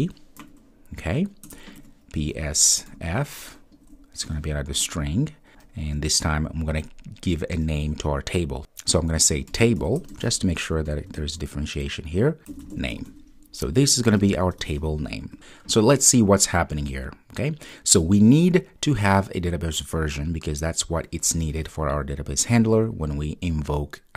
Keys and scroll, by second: 4.8 Return.